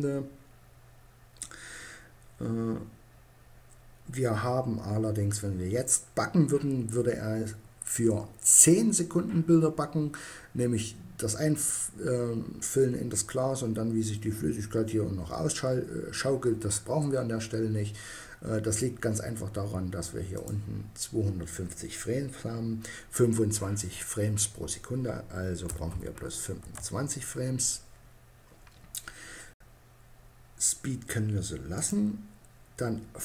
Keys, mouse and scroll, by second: 19.5-20.9 drag, 21.2-30.8 middle drag.